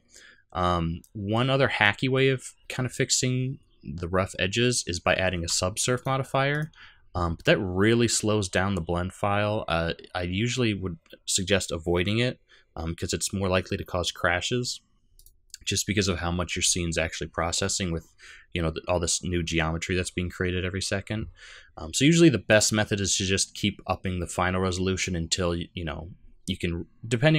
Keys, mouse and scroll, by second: 1.6-2.0 scroll down 3, 1.9-2.6 scroll up 2, 5.9 click, 6.5 click, 15.1 click, 16.9-17.4 scroll down 2, 17.4-18.1 scroll up 1, 22.4 click.